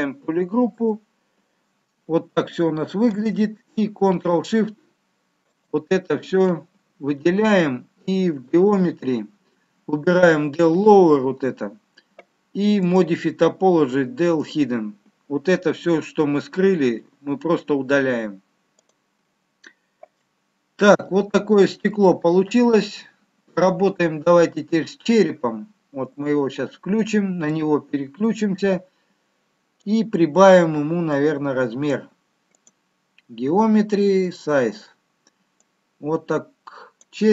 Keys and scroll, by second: 11.4 f.